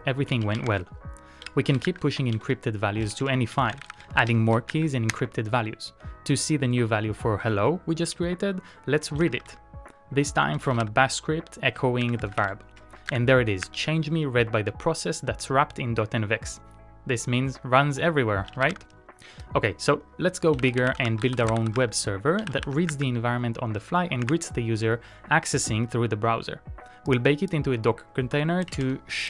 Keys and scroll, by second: 0.4 ctrl+a, 0.7-4.8 typing, 5.4 Return, 9.0-13.3 typing, 13.8 Return, 18.5 ctrl+a, 18.7 shift+k, 20.3-23.7 typing, 24.4 Return.